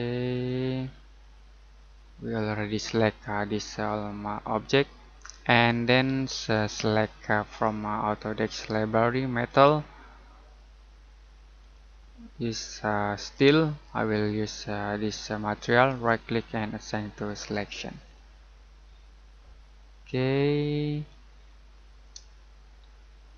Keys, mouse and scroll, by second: 0.7-1.5 scroll down 1, 1.5 middle click, 2.0-2.4 scroll down 1, 2.4 middle click, 6.5 click, 15.8 right click, 17.3 click, 18.9 scroll up 1, 20.4-21.7 scroll down 1, 21.7 middle click, 22.3 shift+middle click.